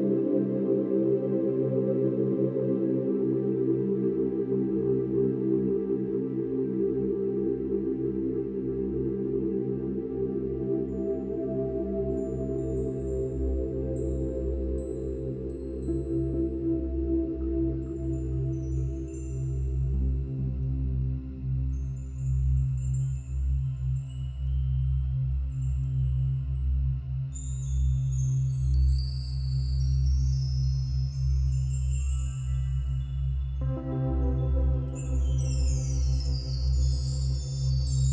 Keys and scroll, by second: 8.8-9.3 space, 15.7-16.0 typing, 16.2 Return.